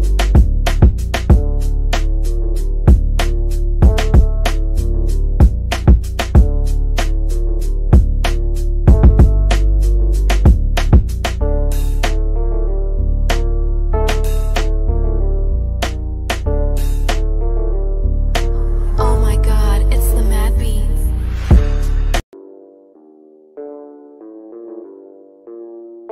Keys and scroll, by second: 1.9 shift+F2, 2.1 F3, 8.5 F3.